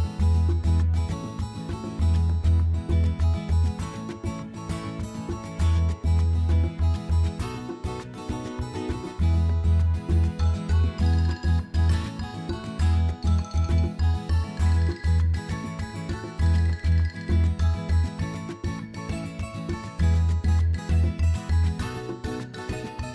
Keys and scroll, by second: 16.8 7, 19.7 Return.